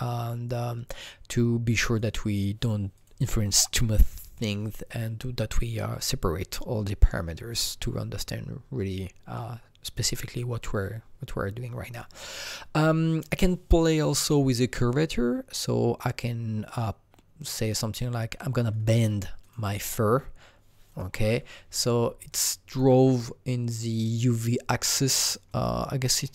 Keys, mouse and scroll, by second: 2.9 click, 13.2 click, 14.1 click, 17.4-20.9 drag, 20.9-22.3 drag, 22.3-25.5 alt+drag, 25.0-26.3 alt+right drag, 25.5-26.3 alt+drag, 26.2-26.3 alt+middle drag.